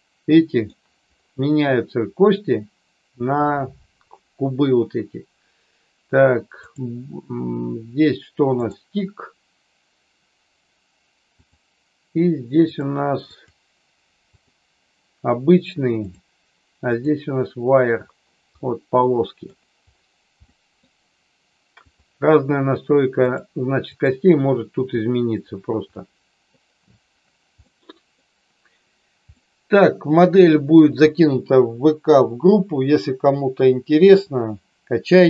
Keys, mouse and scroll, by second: 6.7-8.7 drag, 11.4 click, 12.6 click, 13.3-14.4 drag, 16.1-17.2 drag, 18.5-19.5 middle drag, 20.4 middle click, 21.8 click, 23.2-24.1 drag, 25.9 middle click, 27.7 middle click, 29.4-30.7 middle drag.